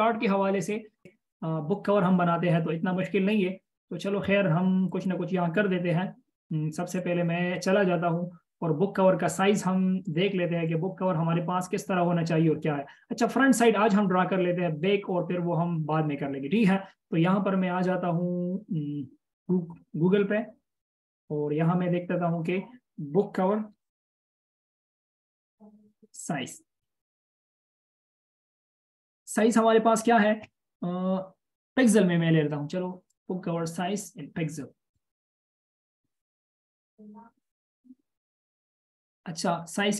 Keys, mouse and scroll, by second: 6.0 right click, 9.3 right click, 16.2 space, 23.4-26.3 typing, 26.7 Return.